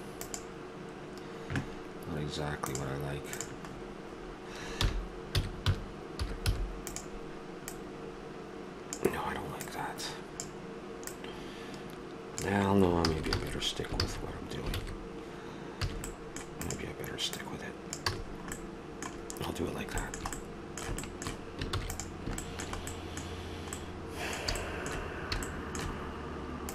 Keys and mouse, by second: 3.3-6.9 drag, 4.8 r, 7.7-9.5 drag, 11.2-12.9 drag, 13.0 ctrl+z, 15.9 ctrl+z, 15.9 a, 16.7-18.1 drag, 18.1 a, 18.3-19.6 middle drag, 21.7 ctrl+s.